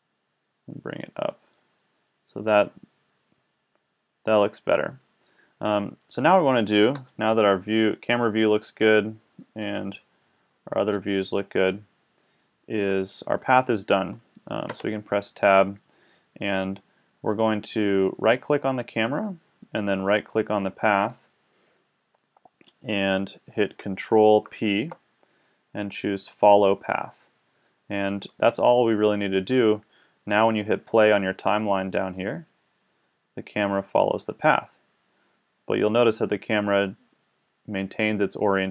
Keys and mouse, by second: 1.0 middle click, 3.7-5.8 middle drag, 6.9 KP_0, 10.5 KP_1, 11.8-13.7 middle drag, 14.7 Tab, 18.0-19.8 right drag, 20.2-21.8 right drag, 24.5 ctrl+p, 32.0 middle click.